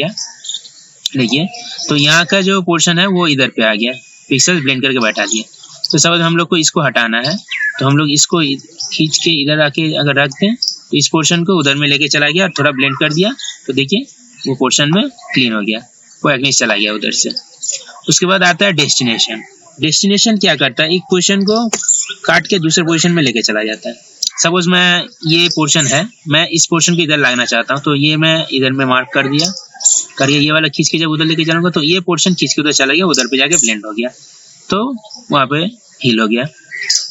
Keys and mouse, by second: 13.2 ctrl+d, 18.9 click, 20.5 ctrl+z, 21.3 ctrl+z, 21.8 ctrl+z, 22.5 ctrl+z, 23.4 ctrl+z, 27.9-31.6 drag, 33.8 ctrl+d.